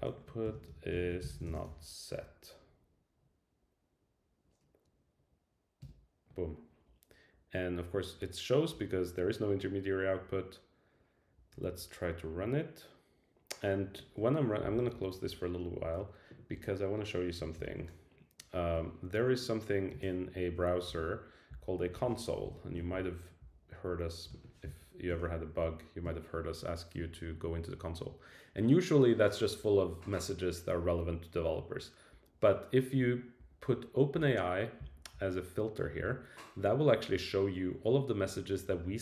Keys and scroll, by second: 0.1 Right, 5.8 Return, 17.6 alt+super+i.